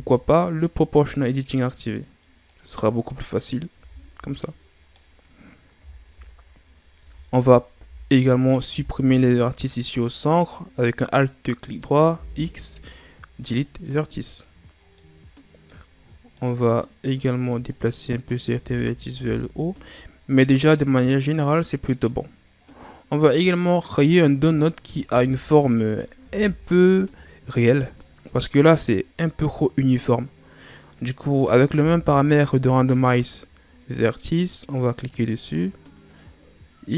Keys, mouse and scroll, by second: 0.8 click, 1.7 right click, 2.4-3.7 drag, 3.7 Tab, 4.0-4.4 scroll down 3, 4.4 middle click, 5.2-5.9 scroll up 1, 5.9-6.7 scroll down 1, 6.7 scroll up 1, 6.9 Tab, 8.2 alt+right click, 12.1 x, 14.9-17.0 middle drag, 17.0 right click, 17.6 click, 18.5 Tab, 18.8 scroll down 4, 19.1 a, 19.3-20.8 middle drag, 20.8-21.3 scroll up 2, 21.8-23.8 middle drag, 23.8 right click, 25.0 Tab, 26.1 a, 27.9-30.9 middle drag, 31.7 w.